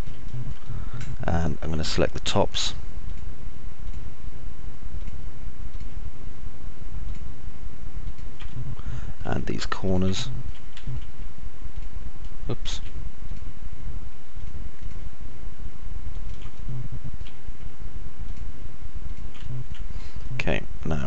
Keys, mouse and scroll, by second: 0.8 middle click, 1.1 alt+middle click, 5.3 ctrl+right click, 8.9 alt+click, 8.9 alt+middle click, 8.9 alt+right click, 10.4 alt+click, 10.4 alt+middle click, 10.4 alt+right click, 12.1 ctrl+right click, 13.1 ctrl+z, 16.4 ctrl+right click, 16.9 alt+click, 16.9 alt+middle click, 16.9 alt+right click, 19.9 alt+click, 19.9 alt+middle click, 19.9 alt+right click, 20.8 middle click.